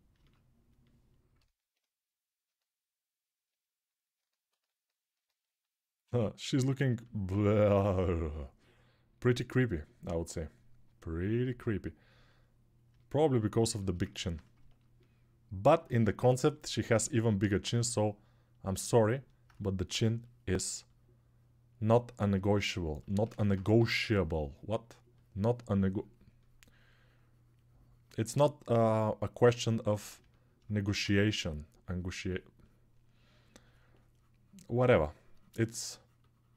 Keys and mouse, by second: 2.4-10.5 drag, 10.5-11.8 alt+right drag, 11.8-36.5 alt+drag, 19.7 6, 23.5 3.